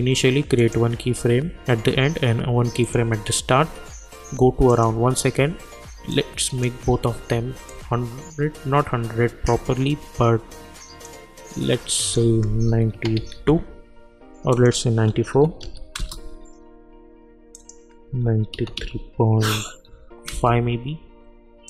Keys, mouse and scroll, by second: 2.8-12.0 drag, 6.4 click, 8.0-10.1 drag, 13.3 Return, 14.5 click, 16.0 Return, 17.5 click, 20.3 Return.